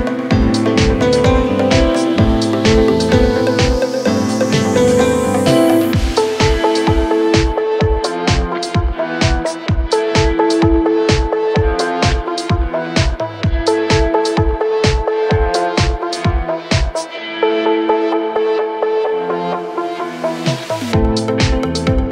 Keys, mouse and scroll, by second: 0.1-4.0 typing, 3.5 scroll up 5, 3.7 middle click, 4.4 right click, 5.6 double click, 5.7 right click, 6.3 double click, 6.5 double click, 6.8 p, 7.5 scroll up 1, 8.0 typing, 9.1 typing, 10.7-11.4 scroll down 32, 11.6-12.2 typing, 11.8 scroll up 4, 13.2 scroll down 6, 13.7-14.5 typing, 13.9 Return, 15.2 Delete, 15.4 middle click, 15.9 scroll up 4, 16.1 middle click, 16.3 scroll down 1, 16.6-16.9 scroll up 4, 16.9 middle click, 17.2 scroll down 3, 17.5 space, 19.3-19.9 scroll down 12, 19.9 scroll up 4, 20.1 middle click, 20.7 m, 20.9 scroll up 3, 21.5-21.8 scroll down 14.